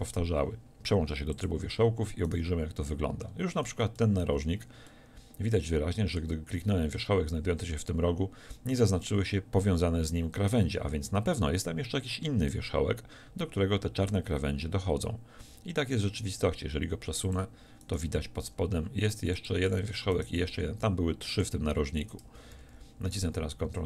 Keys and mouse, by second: 3.2 middle click, 4.3 z, 15.5 g, 17.4-19.3 drag, 18.5 g, 19.5 click, 20.5 g, 22.5 ctrl+z, 22.6 ctrl+z, 22.8 ctrl+z, 23.2 ctrl+z.